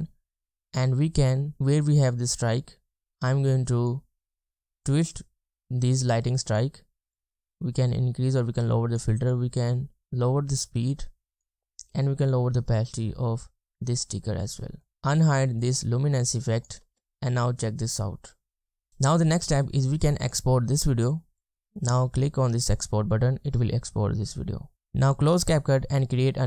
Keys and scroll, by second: 14.9 space, 16.8 space.